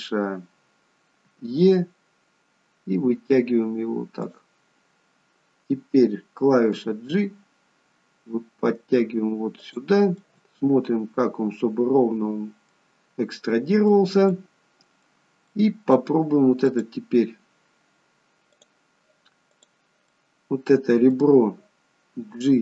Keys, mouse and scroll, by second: 6.8 g, 10.3 middle click, 13.0-13.5 scroll up 2, 13.5 middle click, 14.4 middle click, 16.7 click, 18.6 click, 20.2 middle click, 22.2 g.